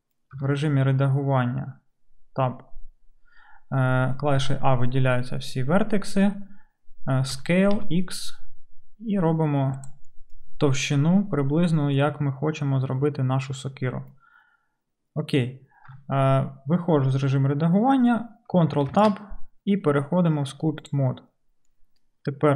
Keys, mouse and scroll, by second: 0.4 Tab, 4.4 a, 10.1 s, 10.3-18.5 middle drag, 15.9 Tab, 17.3 Tab, 18.9 ctrl+Tab, 18.9 ctrl+middle click, 19.9 middle click.